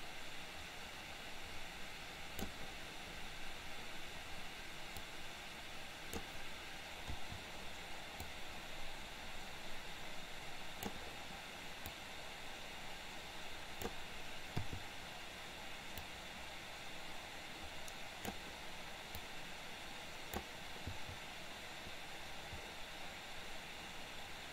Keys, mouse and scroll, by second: 5.2-6.4 drag, 8.4-11.1 drag, 12.0-14.1 drag, 16.1-18.6 drag, 19.2-20.6 drag.